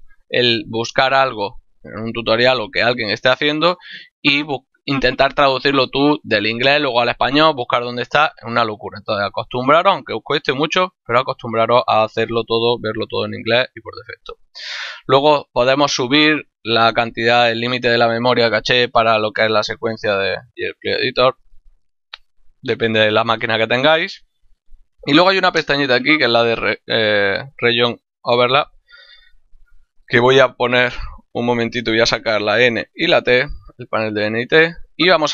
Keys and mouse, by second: 15.1 middle click, 26.0 click, 28.2 click, 31.1 click, 32.0 n, 32.6 t, 33.9 click.